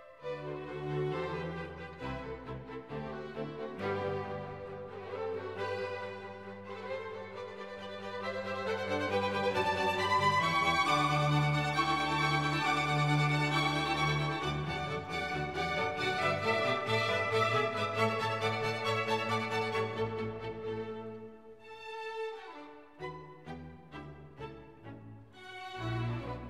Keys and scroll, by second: 1.1 F1, 6.9 Escape, 9.9 4, 10.2 5, 10.5 Return, 17.4 F1, 19.8 Escape.